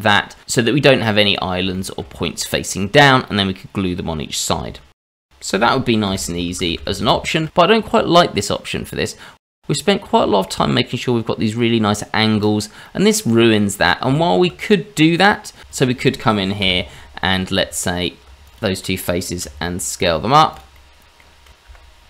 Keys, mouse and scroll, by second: 0.4 click, 0.7 middle click, 2.3-2.7 scroll up 3, 2.9 shift+middle click, 3.7-4.3 scroll down 1, 4.3-4.8 scroll down 1, 6.1 ctrl+z, 6.3 ctrl+z, 6.4 ctrl+z, 6.5 ctrl+z, 6.9 scroll down 2, 7.1 middle click, 7.6-8.5 scroll up 1, 8.5-8.9 scroll up 1, 9.1 middle click, 12.8 middle click, 12.8-13.8 scroll down 1, 13.8 scroll up 1, 14.1 shift+middle click, 15.6 middle click, 15.6 shift+z, 15.7 shift+click, 16.6 KP_Divide, 17.2 middle click, 17.5 Tab, 18.4 click, 18.5 shift+click, 18.8 shift+middle click, 19.4 s, 20.7 middle click.